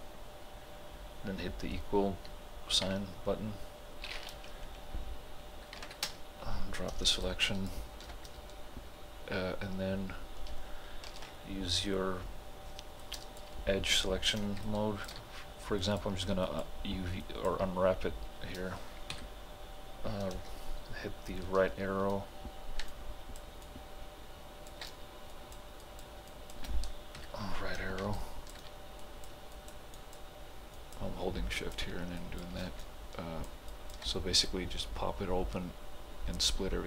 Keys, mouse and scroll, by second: 2.9 =, 5.8 =, 5.8 ctrl+h, 6.1 space, 7.3-10.4 alt+drag, 11.1 alt+click, 11.2 ctrl+b, 13.0-14.7 drag, 14.7 alt+click, 17.4 shift+click, 22.8 alt+Num_Lock, 22.9-25.3 alt+drag, 26.7 shift+click, 27.2 Right, 28.2 alt+click, 32.8 alt+click.